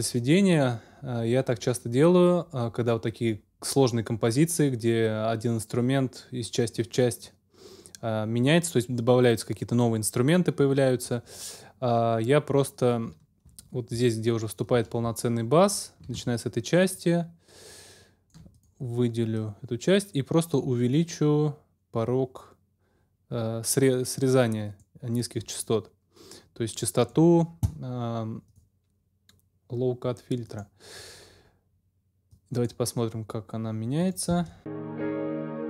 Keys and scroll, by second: 34.3 space.